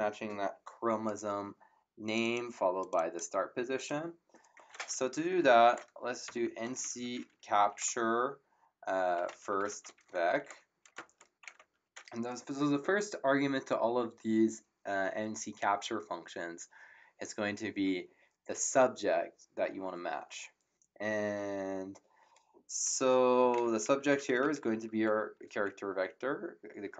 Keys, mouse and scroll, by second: 2.0 click, 5.2-11.5 typing, 23.1-25.3 typing.